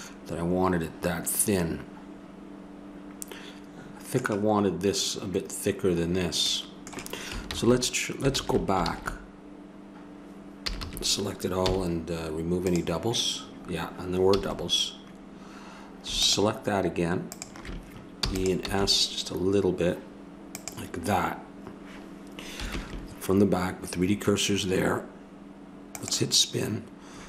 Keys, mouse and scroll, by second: 6.5-7.5 middle drag, 7.5 ctrl+z, 8.3 ctrl+z, 8.8 ctrl+z, 10.7 a, 10.8 a, 11.7 w, 14.4 a, 16.2 right click, 17.0 click, 18.2 e, 18.6 s, 25.9-27.2 drag.